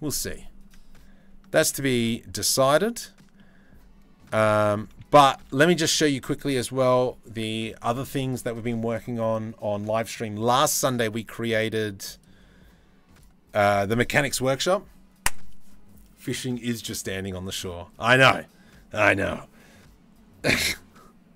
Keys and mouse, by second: 2.3 ctrl+s, 4.3 click, 5.3 ctrl+s.